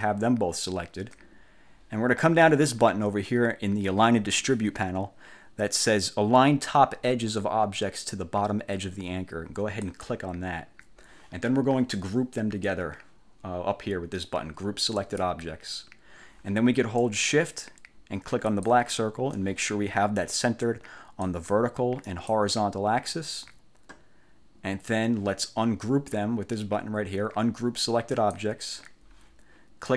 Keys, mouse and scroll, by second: 9.9 click, 15.1 click, 18.6 shift+click, 21.3 click, 22.2 click, 28.3 click.